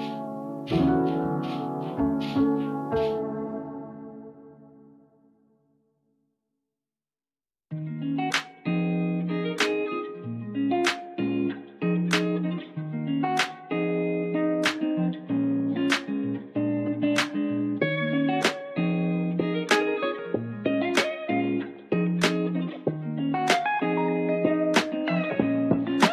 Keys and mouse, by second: 0.0 click, 1.0 s, 1.5 click, 4.4 g, 6.0 click, 7.0 ctrl+middle click, 7.7 ctrl+middle click, 8.5 shift+middle click, 9.6 ctrl+middle click, 12.0 g, 14.3 click, 15.5 s, 16.3 click, 16.9 g, 18.1 click, 18.5 click, 19.6 click, 20.4 g, 21.8 middle click, 22.8 shift+middle click, 23.5 e, 24.5 click, 25.3 r.